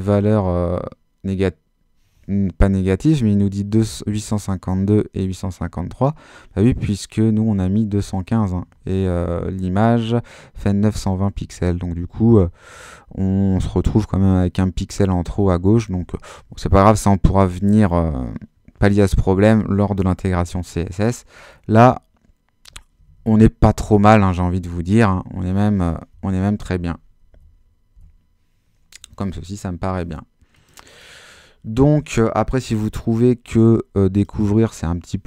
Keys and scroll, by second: 0.2 super+Right, 20.4 super+h, 21.8 super+-, 23.1 super+-, 26.2 super+Up, 26.8 Up, 28.0 Up.